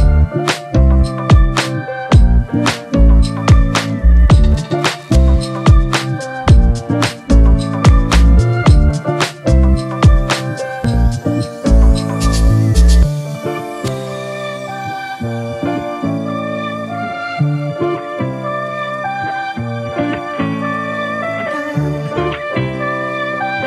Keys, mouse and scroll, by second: 0.9-1.3 typing, 3.0 double click, 8.8 typing, 9.4 double click, 23.3 double click.